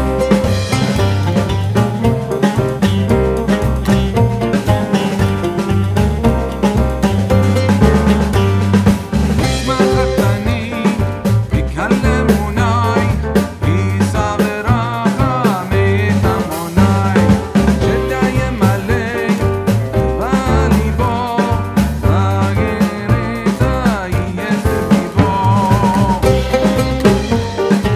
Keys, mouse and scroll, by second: 0.0-3.6 alt+drag, 3.6-7.4 alt+shift+drag, 7.4 shift+c, 9.0 click, 10.5 click, 12.0 typing, 16.1 Down, 16.6-17.3 typing, 16.8 click, 21.7 click, 22.9 typing, 23.0 shift+click, 26.4 typing.